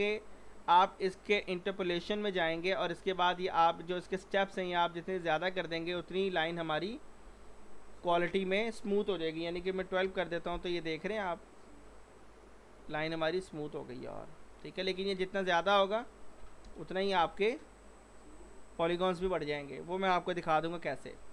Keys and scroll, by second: 9.6 1, 9.8 2, 10.0 Return, 16.4 6, 16.7 Return.